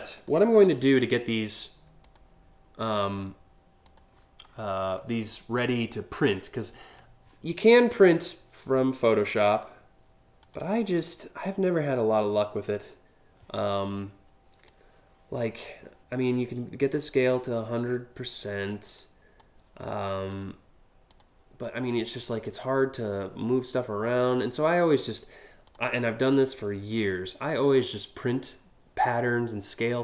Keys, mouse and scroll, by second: 1.7 click, 2.4 click, 3.5 click, 4.2-4.6 scroll up 4, 7.8 click, 10.1 click, 14.4 click, 18.6 click, 20.0 click, 20.8 click, 21.3 click, 25.3 click, 27.5 click, 29.5-30.0 drag.